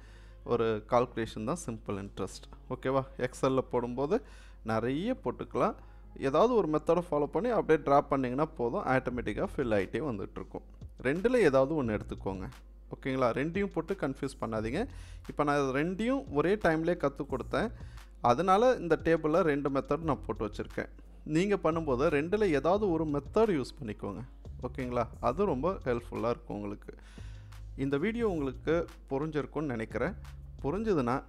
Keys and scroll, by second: 4.3 Delete.